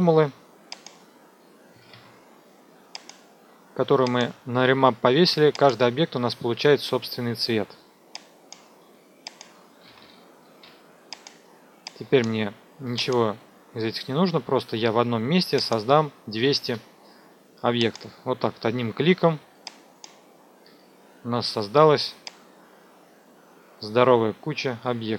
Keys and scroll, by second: 1.7 KP_Subtract, 1.9 KP_6, 2.0 KP_0, 9.8 ctrl+z, 16.3 KP_2, 16.4 KP_0.